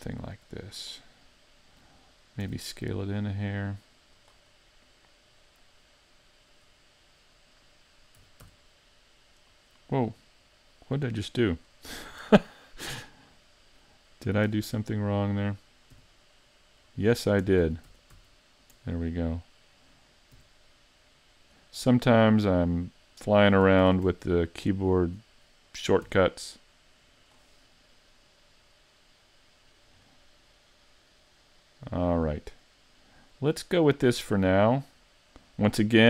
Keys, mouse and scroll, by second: 0.9 click, 2.4 s, 2.9 r, 4.6 middle click, 8.2 e, 9.6 right click, 10.0 middle click, 11.3 middle click, 11.8-12.8 scroll up 2, 12.8 middle click, 14.5 f, 15.9 g, 17.0 right click, 17.6 z, 17.9 z, 18.1 z, 19.1 middle click, 20.4 g, 21.5 right click, 21.9 middle click, 23.8 ctrl+Tab, 23.8 g, 25.0 right click, 26.1 g, 27.3 click, 27.7 middle click, 30.1 middle click.